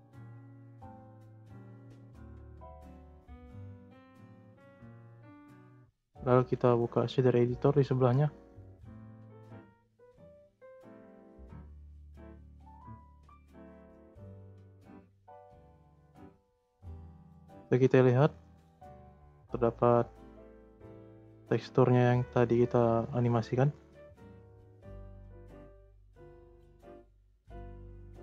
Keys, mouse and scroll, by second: 0.6-1.9 drag, 1.9-2.5 scroll down 3, 3.1-3.9 scroll up 10, 5.1 scroll down 2, 5.7-6.5 scroll up 2, 6.5-9.6 drag, 11.8 click, 12.4-13.2 scroll up 19, 13.2 middle click, 14.0 scroll up 2, 14.2-14.6 middle drag, 14.6-15.8 scroll up 15, 15.8 scroll up 1, 15.8-17.1 middle drag, 17.1 click, 21.1 scroll down 2, 23.2 scroll down 4, 23.8-24.3 scroll up 1, 24.3-24.8 shift+middle drag, 24.8-25.4 scroll down 1, 25.4-26.0 scroll up 4, 26.6 click, 27.7 click.